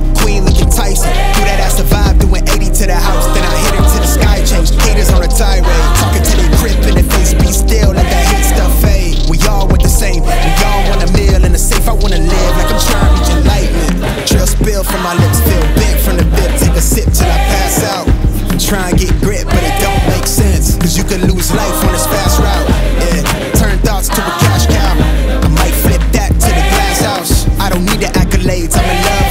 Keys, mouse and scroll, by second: 0.0 click, 9.1-9.6 drag, 14.9 click, 19.7 click, 20.7 right click, 22.5 click, 24.0 ctrl+a, 24.6 click.